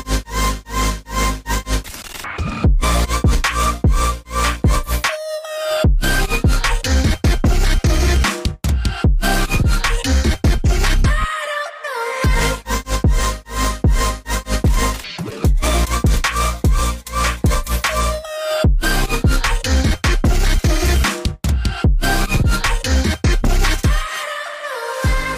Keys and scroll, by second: 13.3 Escape, 21.7 z.